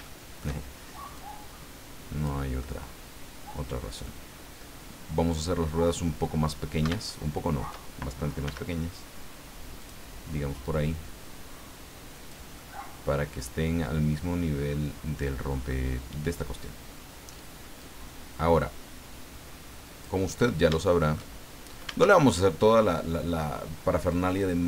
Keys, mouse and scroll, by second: 0.0 shift+click, 0.4 shift+scroll up 2, 1.2-2.4 drag, 2.6-6.0 middle drag, 6.4 scroll up 2, 7.0 shift+middle click, 8.4 s, 9.8 click, 10.6-12.5 drag, 12.6-15.9 middle drag, 17.8-20.2 drag, 20.3 scroll up 1, 20.8 shift+middle click, 21.3 shift+scroll up 1, 22.3 shift+middle click, 24.1 click.